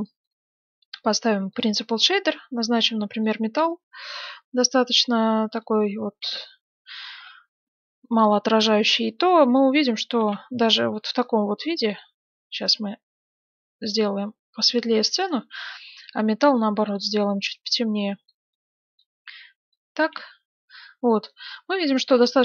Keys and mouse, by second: 6.3 shift+z, 10.2 shift+z, 15.1-18.8 right drag, 16.8-18.8 drag, 20.1 shift+z, 20.9-22.4 middle drag.